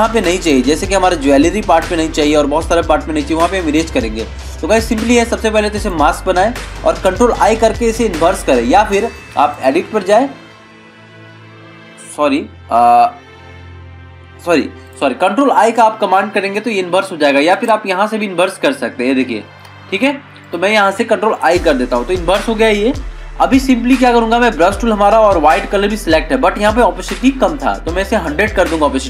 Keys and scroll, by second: 1.1 ctrl+=, 21.6 ctrl+i, 23.2 ctrl+=.